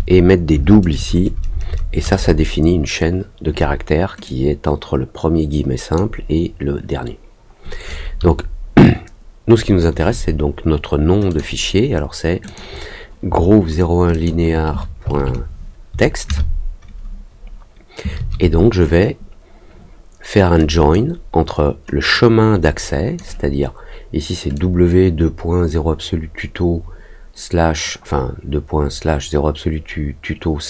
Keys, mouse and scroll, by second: 4.2-5.9 drag, 11.2 click, 12.4 click, 14.1 shift+click, 20.5 click, 22.1-23.1 drag, 24.5-30.6 drag.